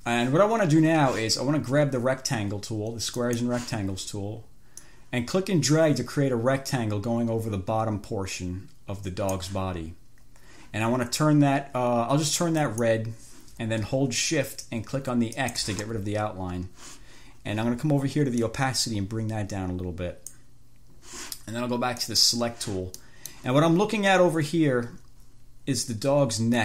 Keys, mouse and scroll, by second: 3.4 click, 5.1-9.8 drag, 12.8 click, 15.6 shift+click, 18.6-20.8 drag, 22.2 click, 23.3 middle click.